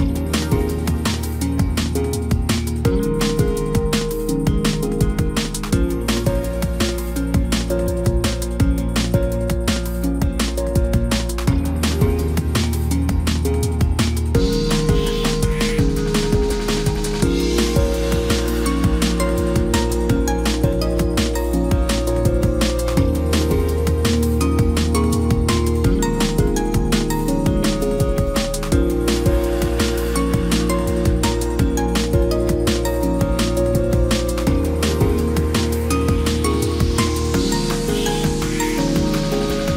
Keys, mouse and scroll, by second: 4.4 ctrl+t, 10.3 ctrl+j, 23.4 ctrl+j, 29.1 ctrl+t, 36.9 Down, 39.3 Left.